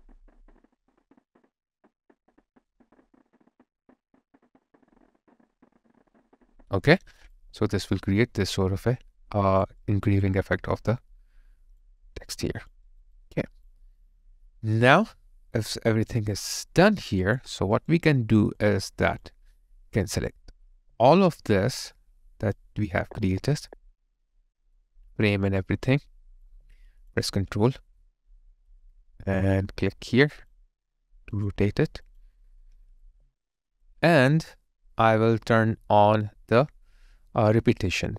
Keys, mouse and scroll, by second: 7.3 space, 7.3 alt+click, 9.8 alt+right click, 10.2 alt+click, 12.0 alt+right click, 12.4 alt+click, 12.9 alt+right click, 13.2 alt+click, 17.2 double click, 17.8 alt+right click, 18.2 alt+middle click, 18.6 alt+click, 21.4 alt+middle click, 25.2 alt+right click, 26.5 alt+click, 30.3 ctrl+click.